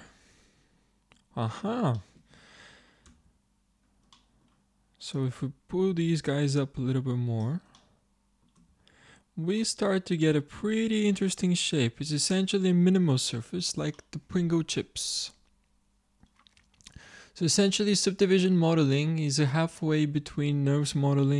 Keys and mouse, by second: 0.0 click, 0.0-3.2 middle drag, 3.2 Tab, 5.8-7.0 drag, 8.6 Tab, 11.1-12.1 middle drag, 14.0-15.3 middle drag, 16.6 Tab.